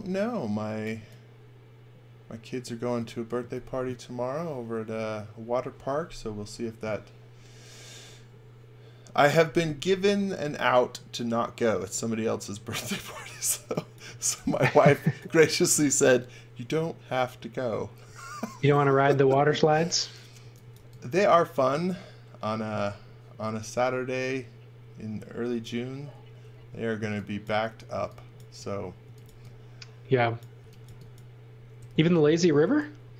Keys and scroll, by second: 13.0 x, 13.4 v, 14.0 x, 14.3 v, 20.3 x, 20.7 v, 21.9 e, 26.5 e, 28.7-30.8 typing.